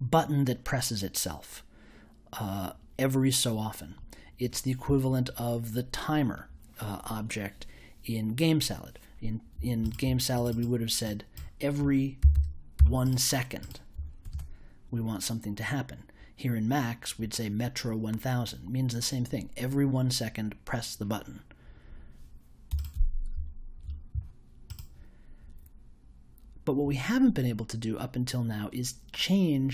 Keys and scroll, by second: 11.7 1, 12.2 0, 14.2 super+j.